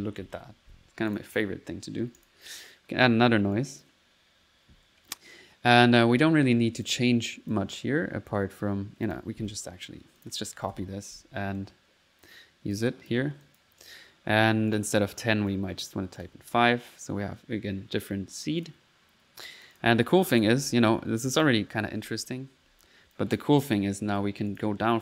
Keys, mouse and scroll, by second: 0.0-0.8 typing, 1.1 click, 2.2-3.3 drag, 3.5 click, 9.0 click, 9.3 click, 9.5 Delete, 10.1 ctrl+click, 10.5-11.2 typing, 11.6 ctrl+click, 12.7 click, 13.4 click, 13.8 click, 13.9-14.7 typing, 14.7 click, 15.1 click, 15.7 click, 18.6 click, 19.4 click, 20.1 click, 20.6-22.6 typing, 23.1 click, 23.7 click, 24.5 click.